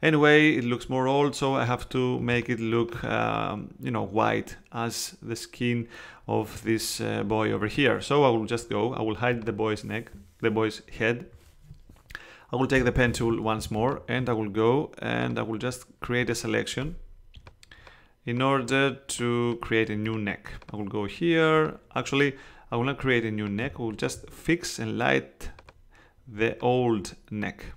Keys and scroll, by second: 2.2 space, 12.7 p, 13.5 space.